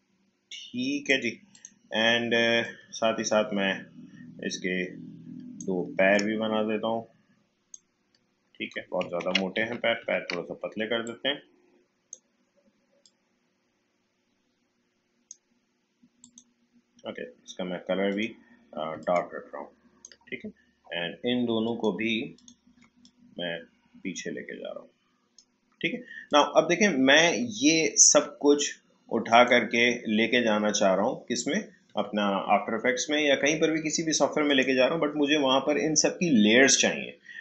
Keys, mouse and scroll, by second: 9.6 ctrl+z, 11.0-29.3 drag, 34.4 click.